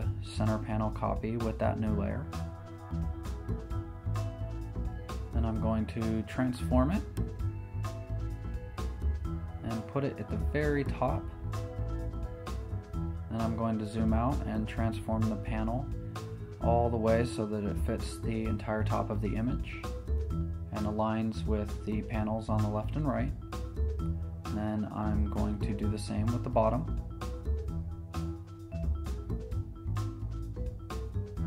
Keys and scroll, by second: 1.3 super+t, 8.8 Down, 10.1 Return, 11.2 super+t, 12.3 super+t, 12.4 Escape, 14.6 z, 15.6 super+t, 21.6 Right, 22.6 Down, 24.8 Return, 25.5 v, 25.6 Down, 25.7 Left, 26.3 z, 27.2 super+j, 29.9 super+t.